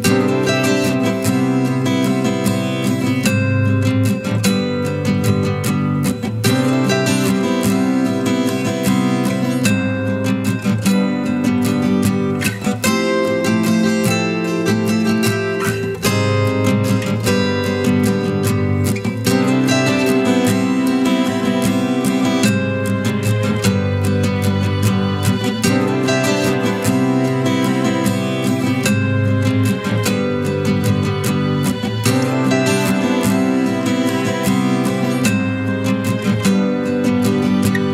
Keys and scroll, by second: 21.4 shift+Delete, 37.6 ctrl+t.